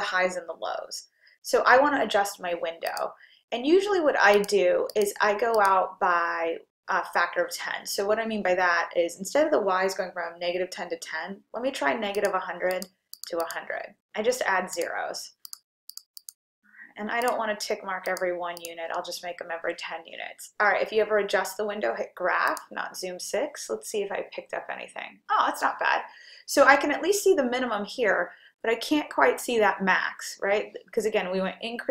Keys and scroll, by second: 4.4 Down, 5.0 Down, 7.0 Down, 12.9 1, 13.6 0, 14.2 0, 14.8 Return, 15.6 1, 16.1 0, 16.7 0, 17.2 Return, 18.2 1, 18.7 0.